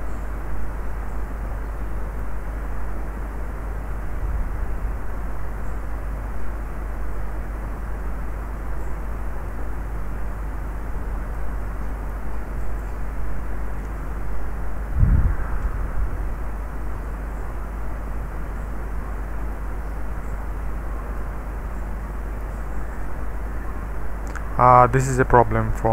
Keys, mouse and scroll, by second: 0.9-2.2 drag, 3.0 space, 3.9 space, 4.4-5.3 scroll down 2, 5.3-6.2 scroll up 1, 6.4-8.9 drag, 9.1 click, 9.2-10.4 middle drag, 11.4 middle click, 12.2 middle click, 12.6 click, 14.2 space, 14.2 d, 15.6 …, 15.6 d, 16.8-18.6 scroll down 1, 18.6 space, 19.5-21.2 middle drag, 22.2 typing, 22.5 middle click, 23.1-23.5 scroll down 1, 23.5-25.9 scroll up 1.